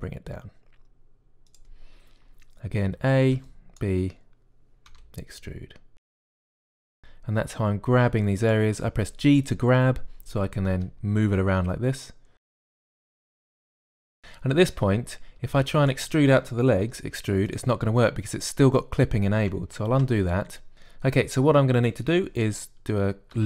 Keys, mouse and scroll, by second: 0.0 e, 3.8 a, 4.1 b, 5.7 e, 6.6 a, 6.8 b, 7.6 g, 11.6-14.0 typing, 16.2 a, 16.3 b, 17.7 e.